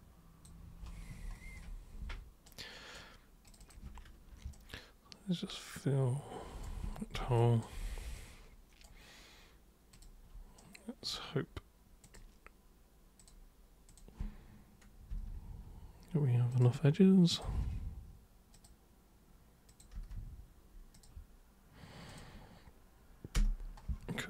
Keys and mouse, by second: 2.5 super+right click, 3.5 super+click, 4.6-6.6 shift+super+right drag, 7.4 alt+super+click, 8.2 super+right click, 9.9 super+click, 10.6 right click, 12.1 click, 13.2 click, 13.9 click, 15.2 Return, 16.6 super+click, 17.4 super+click, 17.7 super+Return, 18.5 super+click, 19.7 super+click, 19.9 super+Return, 20.9 super+click, 22.1 super+click, 23.4 super+Return.